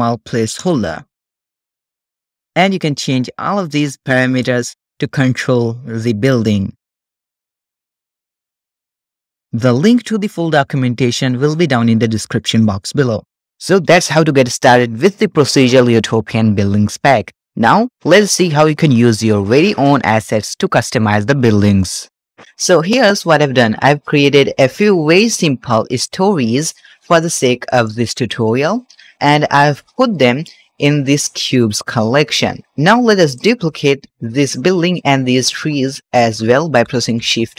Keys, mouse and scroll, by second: 3.0 click, 3.8-6.8 drag, 7.2-8.5 drag, 9.1 click, 9.5-11.3 middle drag, 22.8-23.3 middle drag, 23.4-23.9 scroll up 2, 23.7 shift+middle drag, 25.8 click, 26.6-27.0 shift+middle drag, 27.3 scroll up 2, 27.6 shift+middle drag, 28.0 scroll up 1, 28.1 middle drag, 28.6 shift+middle drag, 28.8 shift+scroll down 1, 28.9-29.2 scroll up 3, 29.5 middle click, 30.0-30.3 shift+middle drag, 31.4 click, 33.1 click, 34.8 shift+click, 35.4-35.8 shift+middle drag, 35.8 scroll down 1, 36.6 shift+d, 37.1 shift+z.